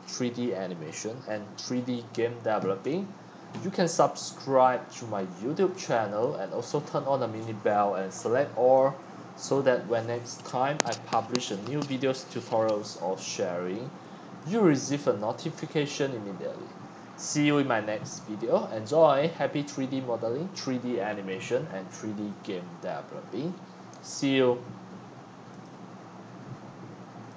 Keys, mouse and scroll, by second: 2.8 middle click, 2.8 scroll up 8, 3.9 scroll, 4.9-5.2 scroll, 5.2-5.8 scroll up 3, 5.8 x, 6.2 click, 6.3 c, 6.9 right click, 7.4-7.8 scroll up 16, 8.7 click, 9.4 click, 13.1 middle click, 14.4 click, 15.3-17.3 drag, 22.2 middle click, 23.8 scroll down 4, 24.3-24.9 scroll up 4, 27.0 click.